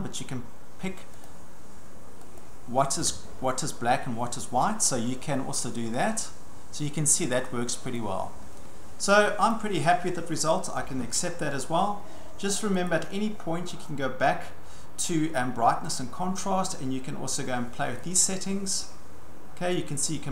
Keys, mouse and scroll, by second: 1.2 click, 2.4 click, 8.0 click, 9.5 click, 12.9 click, 16.0 click, 20.1 click.